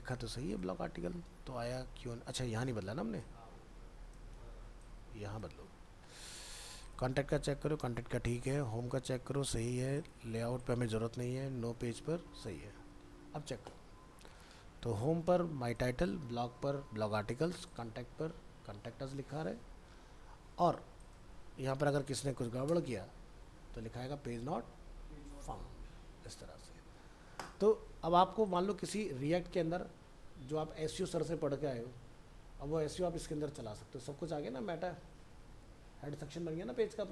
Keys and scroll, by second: 1.1 ctrl+s, 4.4 ctrl+c, 5.6 ctrl+v, 5.9 ctrl+s, 12.7 ctrl+s, 13.1 alt+Tab.